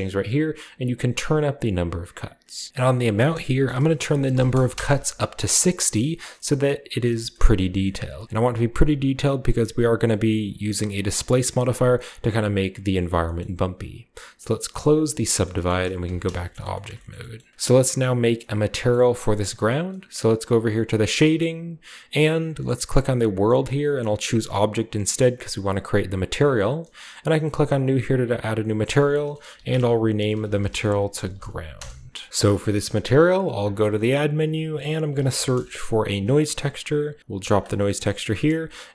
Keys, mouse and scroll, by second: 1.2 click, 1.7 click, 2.1 click, 2.7 ctrl+z, 4.2 typing, 4.7 Return, 5.7 scroll down 1, 6.3 middle click, 7.1 shift+middle click, 7.4 scroll up 1, 7.7 shift+middle click, 8.0-9.0 shift+middle drag, 8.0-9.0 shift+scroll up 1, 17.1 Tab, 17.1-17.5 shift+scroll up 1, 17.2-18.4 shift+middle drag, 17.5 ctrl+b, 18.7 middle click, 18.9-20.4 middle drag, 20.9 click, 21.7-22.4 scroll down 1, 23.3 click, 25.7 click, 27.1 scroll down 2, 27.6 click, 28.4 click, 28.4 scroll down 1, 29.6-33.6 typing, 32.3 middle click, 34.3 click, 35.1-36.7 typing, 37.5 click.